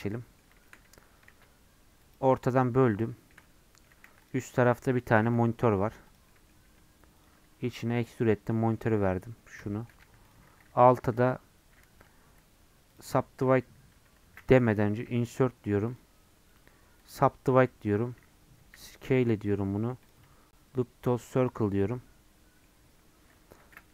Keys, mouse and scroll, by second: 0.0 middle click, 0.8 Tab, 1.3 ctrl+r, 3.1-4.1 shift+middle drag, 4.1 3, 4.3 click, 5.2 i, 6.3 middle click, 6.7 e, 7.5 Tab, 7.8-10.0 middle drag, 10.0 Tab, 10.3 click, 13.0-14.2 right drag, 14.2 ctrl+z, 15.1 i, 17.1-18.6 right drag, 18.6 s, 21.5 right click, 21.8-23.6 middle drag, 23.6 ctrl+z.